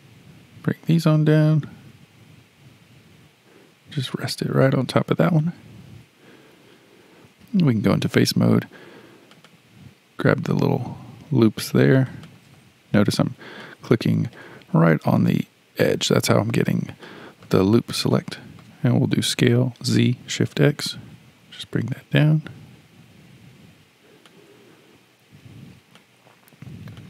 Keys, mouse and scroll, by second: 7.5 3, 9.3 click, 9.5 click, 12.1 shift+click, 12.3 shift+click, 13.2-13.6 scroll up 6, 13.6-16.2 shift+middle drag, 16.2-17.0 scroll down 5, 17.0 shift+middle click, 17.8-18.1 scroll down 3, 18.1-19.2 shift+middle drag, 19.2 s, 26.0-27.0 shift+middle drag.